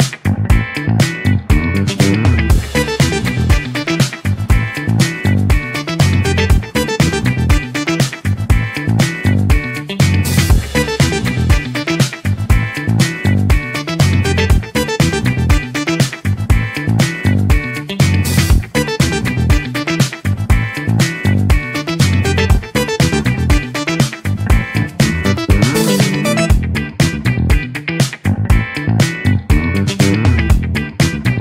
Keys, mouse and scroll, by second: 0.3-1.4 scroll down 3, 9.1-11.1 middle drag, 11.1 click, 11.5-12.6 middle drag, 12.6 s, 15.6-17.0 drag, 19.6 click, 21.4 click, 21.9 click, 24.2 scroll up 1, 24.3-25.8 middle drag, 25.8 click, 27.1 click, 27.4-28.7 middle drag, 28.7 scroll down 3, 29.5 click.